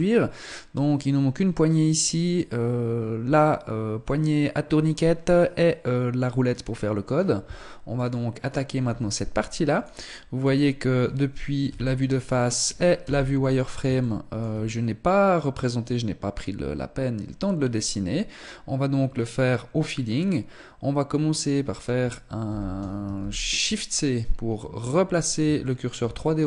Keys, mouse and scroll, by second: 10.0 click, 11.2 KP_1, 11.9 scroll down 2, 12.5 z, 13.5 shift+middle click, 17.9-19.7 scroll up 1, 19.7-20.0 scroll down 2, 22.0 ctrl+c, 22.7 shift+c, 23.7-24.2 scroll up 4, 25.1 shift+middle click, 25.7 scroll up 1.